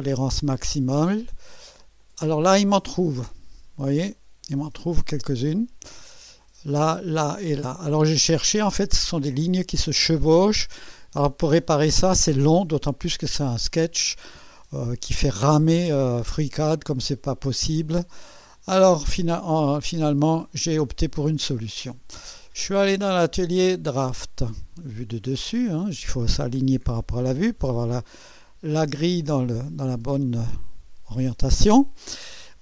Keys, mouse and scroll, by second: 2.0 click, 3.8-4.7 drag, 5.5 click, 15.8-18.4 drag, 19.0 click, 19.4 middle click, 19.7-20.8 drag, 21.9 click, 22.9 click, 23.9 click, 25.3 click, 28.2-29.2 right drag.